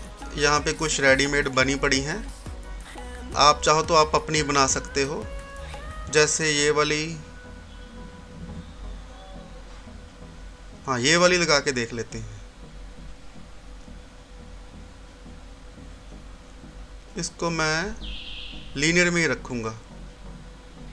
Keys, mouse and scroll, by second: 2.9-5.2 scroll down 1, 6.8 click, 11.9 click, 13.0-14.9 scroll up 1, 15.6 click, 18.9-20.4 scroll up 1.